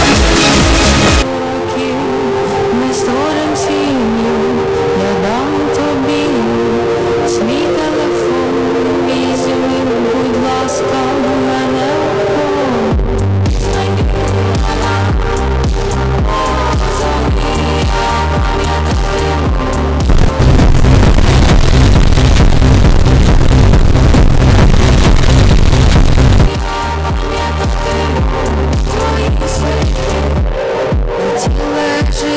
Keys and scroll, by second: 1.9 Page_Down, 27.1 Page_Down.